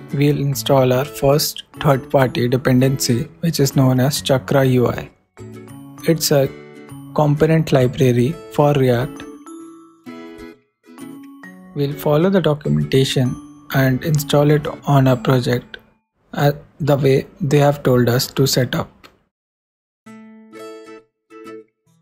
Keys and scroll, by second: 20.0 super+Tab.